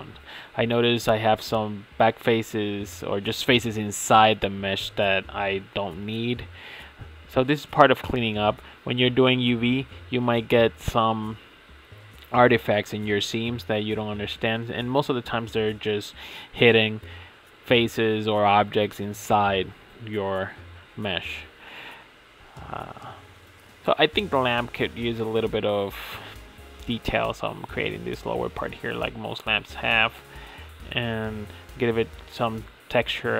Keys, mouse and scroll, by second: 2.4 middle click, 4.1-8.3 middle drag, 8.8-11.7 middle drag, 12.1-14.5 middle drag, 14.7-15.5 middle drag, 15.9-17.3 middle drag, 27.0-28.9 middle drag, 29.4 middle click, 31.7 middle click.